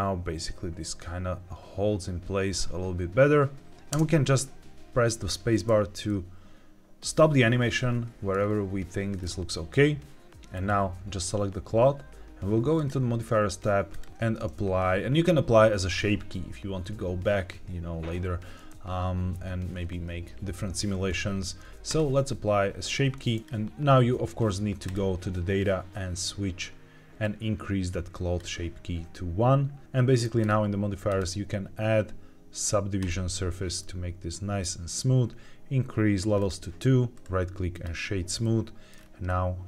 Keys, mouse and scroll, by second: 3.9 space, 6.0-8.2 middle drag, 8.3-9.1 scroll down 2, 9.1-10.5 scroll up 2, 10.5 click, 12.7 click, 13.8-21.9 drag, 23.4 click, 24.8 click, 30.3 drag, 31.0-33.7 drag, 33.7 middle click, 36.3 click, 37.1-37.8 right drag, 38.3-38.8 middle drag, 38.8-39.2 scroll down 2, 39.2-39.6 middle drag.